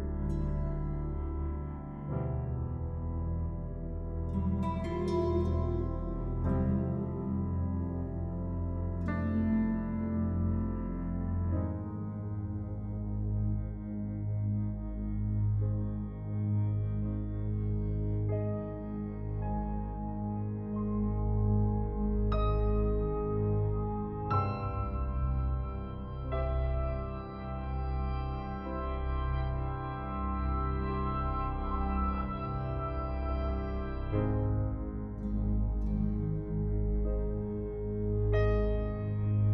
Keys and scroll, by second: 8.8 ctrl+y, 26.0 ctrl+y, 27.3 ctrl+0.